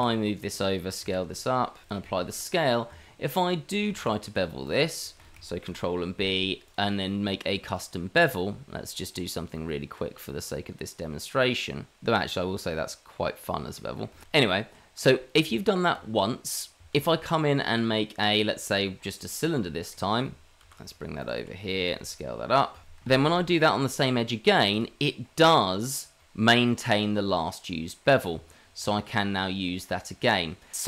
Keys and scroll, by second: 0.5 s, 2.1 ctrl+a, 2.9 Tab, 5.6 ctrl+b, 15.4 Tab, 16.9 shift+a, 18.8 g, 19.5 s, 20.6 ctrl+a, 21.3 Tab, 23.3 ctrl+b, 28.1 Tab.